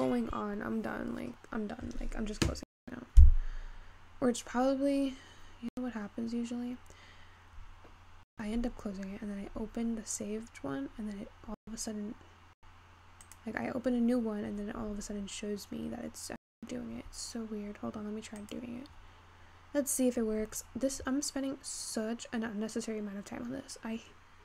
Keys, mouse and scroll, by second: 5.4-7.3 scroll down 3.